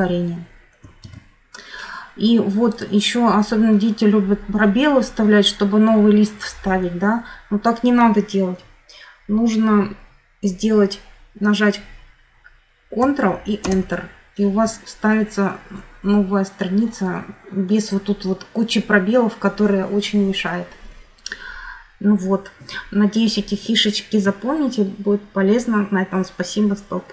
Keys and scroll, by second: 0.7 ctrl+z, 13.3 ctrl+Return.